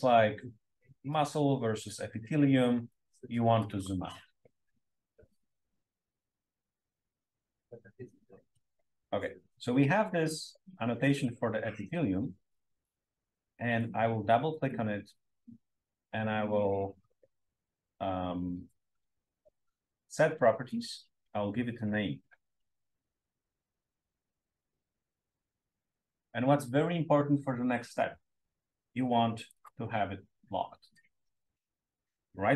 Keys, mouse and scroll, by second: 6.2-8.3 scroll down 2, 7.2 BackSpace, 8.3-8.8 scroll up 2, 8.8 click, 9.2-9.8 scroll up 1, 13.4 click, 13.5-14.2 scroll up 1, 14.4 click, 14.6 click, 20.6 click, 21.7-24.3 typing, 29.4-31.8 drag, 32.2 right click.